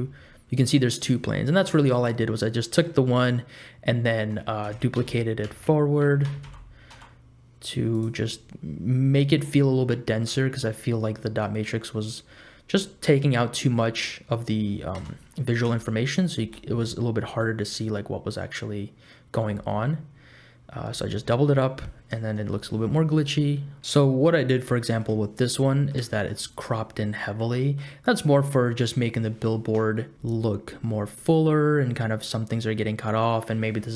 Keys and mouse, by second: 2.0 click, 4.8 shift+d, 8.2 click, 8.6-9.7 middle drag, 10.6 ctrl+z, 11.2 middle click, 12.8 middle click, 13.7 middle click, 14.9 KP_0, 15.7 space, 16.5 space, 17.5 click, 19.4 space, 21.0 space, 22.3 KP_0, 24.8 shift+click, 25.6 click, 25.8 middle click, 26.1 shift+middle click, 27.6 middle click.